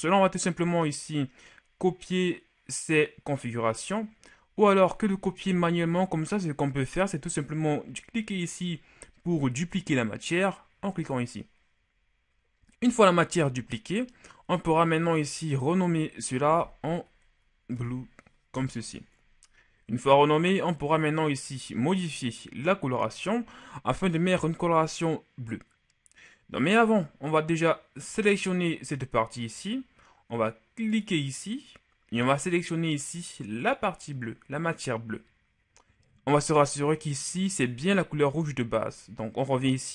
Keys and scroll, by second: 5.5 b, 16.4 b, 16.6 l, 17.7 u, 17.8 e, 18.5 Return.